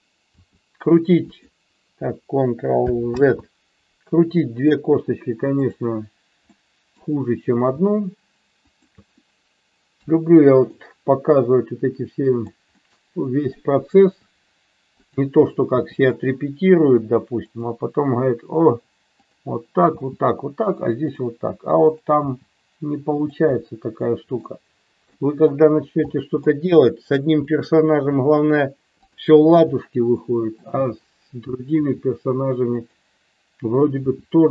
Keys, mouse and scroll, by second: 0.3 r, 1.2 click, 3.1 ctrl+z, 4.3 middle click, 6.6 middle click, 8.7 shift+click, 10.0 KP_3, 10.8 middle click, 12.8 middle click, 14.0 r, 15.0 click, 15.8 g, 17.4 click, 19.3 click, 19.8 g, 21.8 click, 22.2 g, 23.5 middle click, 25.2 middle click, 26.1 middle click, 27.5 shift+middle click, 31.7 r, 32.7 click, 33.9 g.